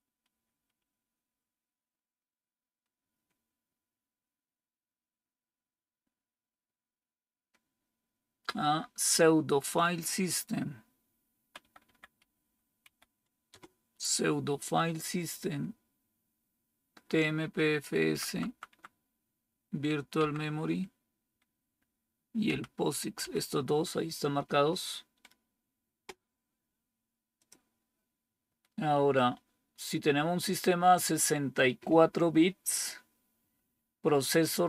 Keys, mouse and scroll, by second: 0.2 Up, 0.4 Up, 0.8 Up, 0.9 Up, 1.2 Up, 11.5 Down, 11.9 Down, 12.1 Up, 12.3 Up, 12.7 Down, 13.4 Return, 17.9 Down, 18.4 Down, 18.5 Down, 20.0 Down, 23.1 Down, 23.1 Up.